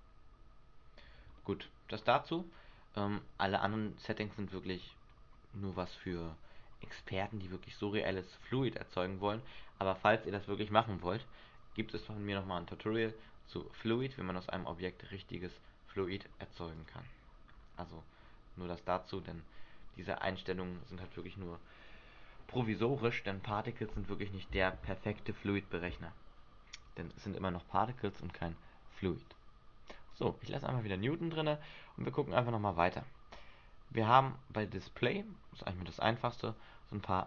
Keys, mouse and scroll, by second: 1.3 Escape, 1.4 middle click, 2.2-2.7 scroll up 2, 14.1 click, 16.9 click, 17.6-18.5 scroll down 1, 18.5 scroll down 2, 30.3 click, 30.9 scroll down 1, 31.8 scroll down 6.